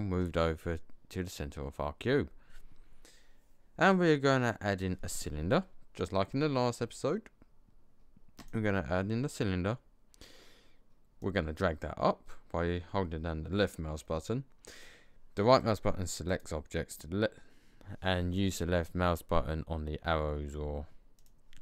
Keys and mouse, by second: 5.9-8.5 drag, 12.9 click, 15.5-18.1 drag, 21.1-21.6 drag.